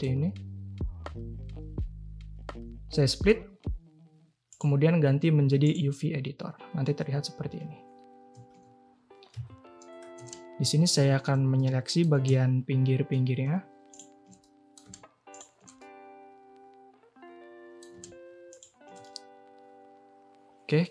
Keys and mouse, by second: 4.5-5.7 drag, 7.9 Tab, 8.3 a, 8.5 a, 9.3 2, 10.8-11.2 alt+shift+drag, 11.5 click, 14.4 click, 15.7-17.8 drag, 19.0-20.9 drag.